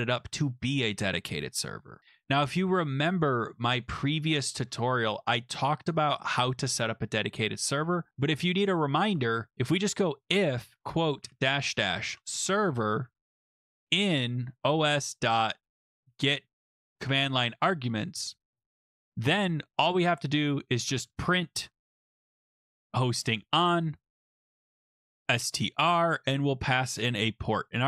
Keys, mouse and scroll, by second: 1.5 scroll, 3.8 click, 4.7-5.2 scroll, 5.2-5.6 scroll down 17, 6.4-6.9 scroll up 3, 8.1 click, 9.1 Return, 9.5-17.3 typing, 9.7 scroll, 18.4-19.1 typing, 20.4-25.5 typing.